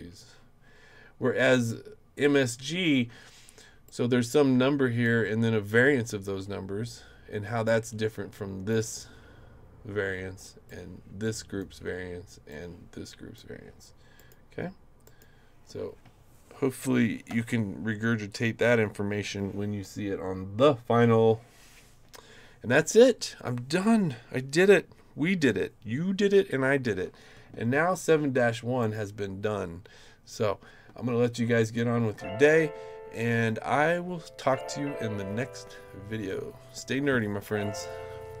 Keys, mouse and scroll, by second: 1.5 click, 3.8-5.0 drag, 7.6-8.7 drag, 10.7 click, 12.5 click, 14.2 click, 15.0 click, 28.8 click, 31.6 click.